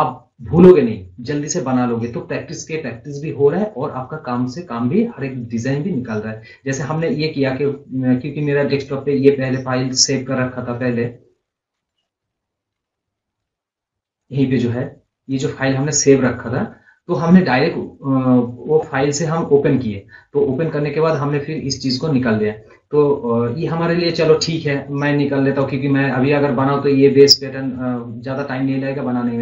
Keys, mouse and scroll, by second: 6.2 scroll up 1, 6.5 scroll down 1, 6.9 scroll, 7.9-8.5 scroll up 1, 8.5-9.9 drag, 14.6-17.1 drag, 18.5 scroll down 1, 20.1 scroll up 1, 20.7 scroll down 1, 21.5-24.4 drag, 25.6 click, 26.9 scroll down 1.